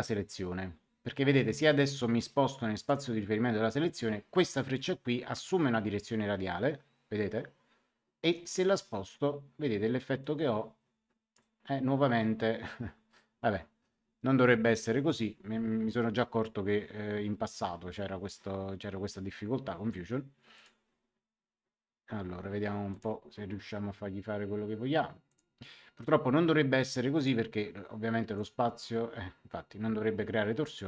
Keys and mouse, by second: 2.7 click, 4.7 click, 8.7 click, 15.0 click, 20.5 click, 22.8 click, 25.2 click, 27.1 click, 28.3 click.